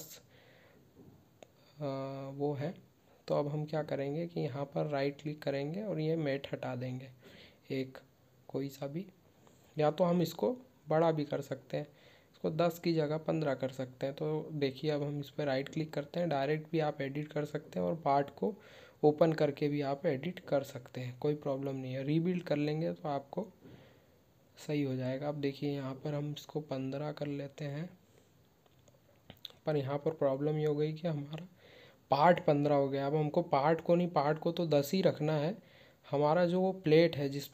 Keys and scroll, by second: 0.2 ctrl+Tab, 27.1 ctrl+q.